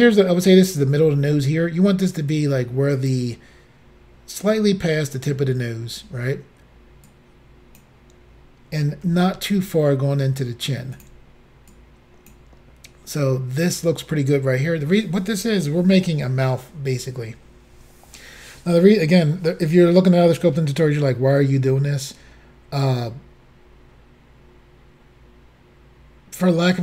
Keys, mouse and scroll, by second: 2.3 click, 7.1 click, 9.1 s, 11.0 click, 11.8 click.